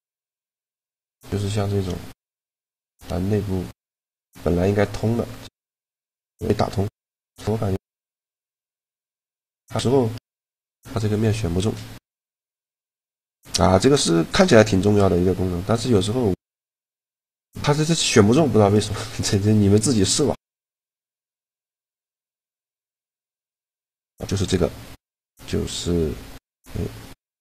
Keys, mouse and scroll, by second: 1.9 z, 4.6-7.1 middle drag, 8.4 x, 16.1-18.1 middle drag, 18.6-21.3 middle drag, 21.3 z, 22.6 a, 23.2 a, 25.2 click, 25.2 a, 26.7 click.